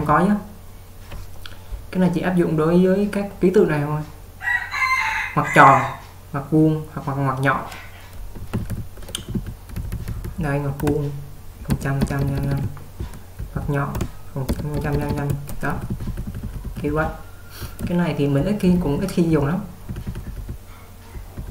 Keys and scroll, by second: 8.6-10.3 typing, 11.8-21.5 typing.